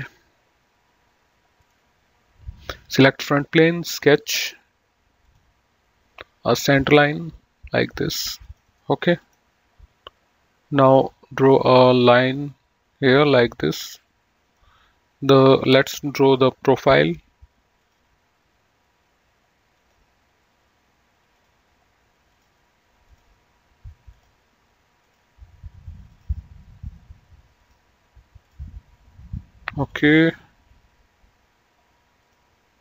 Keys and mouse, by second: 1.8 click, 3.5 click, 5.5 click, 6.9 click, 8.6 click, 8.9 right click, 9.5 click, 11.2 click, 13.8 click, 17.1 click, 19.9 click, 21.6 click, 26.3 click, 27.7 click, 30.2 click, 32.5 click.